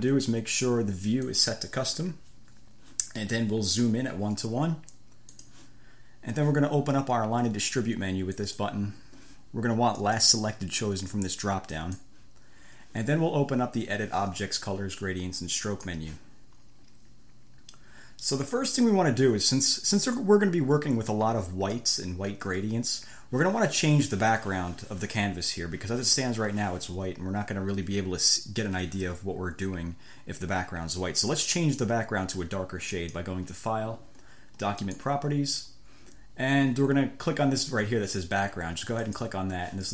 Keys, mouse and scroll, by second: 1.5 click, 5.6 click, 8.6 click, 10.2 click, 11.9 click, 15.9 click, 18.7 click, 33.1 click, 35.1 click, 39.3 click.